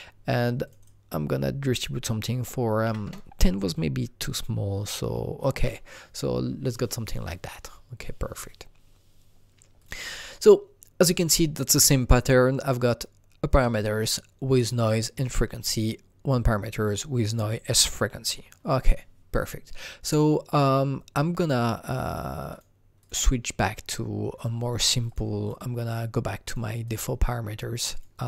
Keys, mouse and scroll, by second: 0.6 click, 0.8 double click, 2.8 KP_5, 3.0 KP_Enter, 4.3 click, 9.8 KP_Enter, 9.8 click, 22.5 click, 23.0 click, 24.4 click, 25.4 click, 26.4 click, 27.9 click.